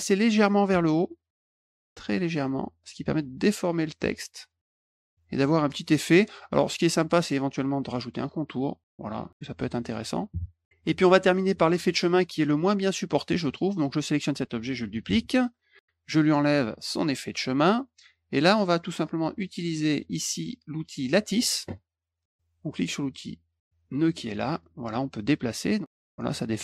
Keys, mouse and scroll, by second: 1.6 middle click, 1.8 middle click, 2.0-4.5 drag, 5.4 middle click, 8.5 middle click, 9.2 click, 9.3 middle click, 11.4 click, 12.3 middle click, 13.5 click, 15.0 ctrl+d, 15.4 click, 17.1 click, 19.4 click, 21.2 click, 23.8 click, 24.4 middle click, 24.6 middle click, 25.7 click, 26.0 click.